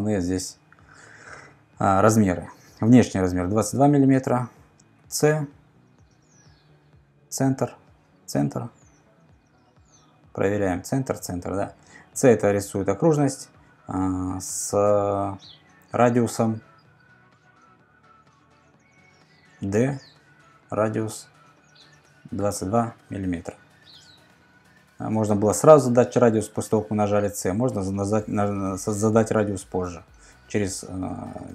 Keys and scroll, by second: 3.7 super+Tab, 5.0 c, 18.9 d, 22.4 typing, 23.0 Return.